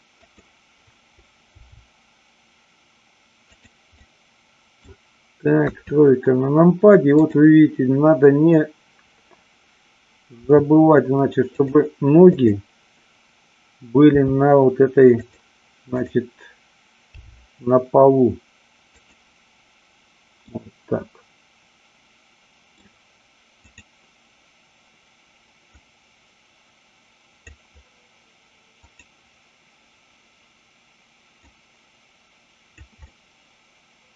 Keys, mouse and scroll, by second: 0.3 click, 1.5 g, 3.6 click, 3.9-4.8 middle drag, 5.7 KP_3, 7.2 click, 10.5 r, 11.6 click, 12.3-13.5 drag, 14.1 r, 15.2 click, 17.1 g, 20.5-22.8 middle drag, 23.6-25.1 drag, 25.6-27.5 drag, 28.8-30.3 drag, 31.5-32.8 drag, 33.0-34.1 middle drag.